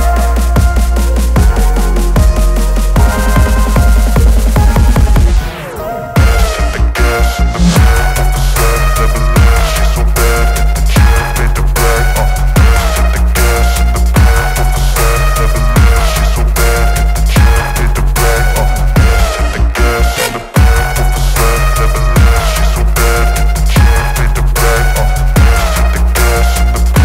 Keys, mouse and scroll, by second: 1.0-2.0 alt+drag, 3.3-3.7 alt+scroll down 1, 4.5 click, 5.5-7.2 alt+drag, 7.9-9.6 click, 14.3 ctrl+0, 15.9 v, 19.3-20.0 drag, 20.9-21.8 typing, 22.4 Return.